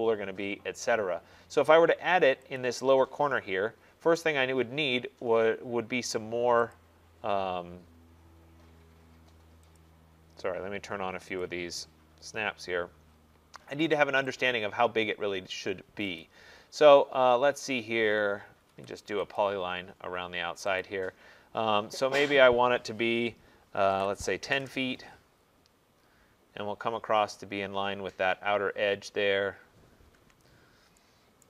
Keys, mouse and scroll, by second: 2.6 click, 3.8 middle click, 3.8 middle click, 4.3 middle click, 6.8 click, 6.8 middle click, 9.8 click, 11.4 click, 14.5 click, 14.8 middle click, 14.9 middle click, 16.3 click, 16.3 middle click, 18.7 Escape, 19.4 click, 20.9 click, 23.9-24.6 typing, 25.4-25.9 scroll, 27.1 middle click, 27.1 middle click, 28.3 middle click, 28.9 middle click, 29.0 middle click, 30.3 Return.